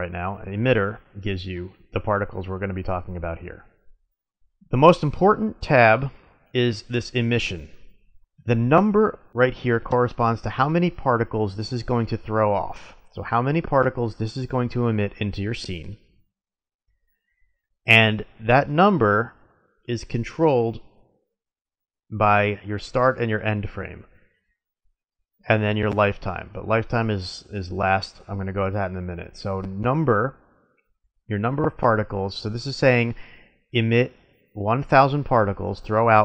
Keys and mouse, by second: 0.4-1.9 middle drag, 4.3-36.2 middle drag.